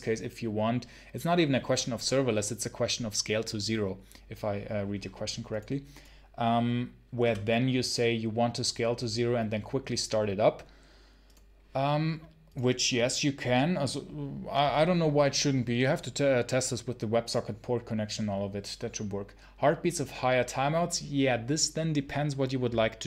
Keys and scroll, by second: 22.9 ctrl+super+l.